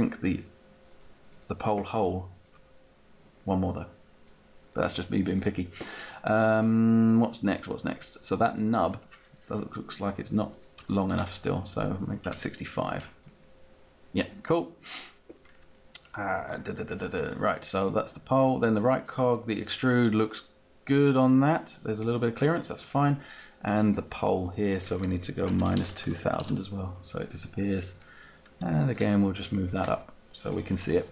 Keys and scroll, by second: 2.4 Down, 3.1 Down, 10.8 Up, 24.9-26.3 typing.